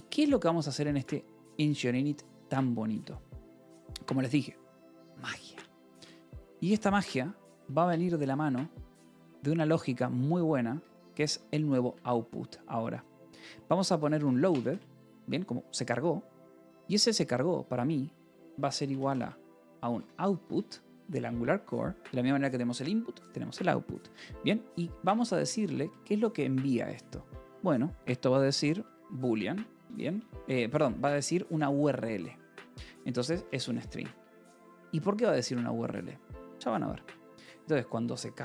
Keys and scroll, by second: 1.6 shift+;, 1.8 :, 2.8 Return, 3.2-7.9 typing, 10.6 Escape, 10.7-14.8 typing, 11.8 Escape, 18.2-20.8 typing, 21.0 Return, 25.0 Escape, 25.2 h, 25.5 a, 27.5 Left, 28.2-29.7 typing, 31.2-33.7 typing, 34.1 Escape, 35.0-36.2 typing.